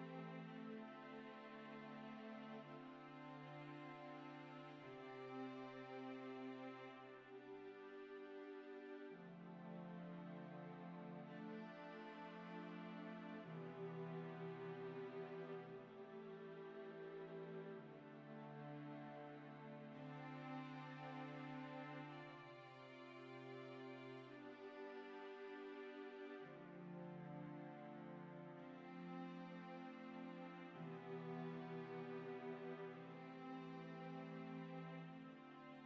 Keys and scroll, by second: 17.1 i, 20.8 f, 24.3 i, 34.8 Delete.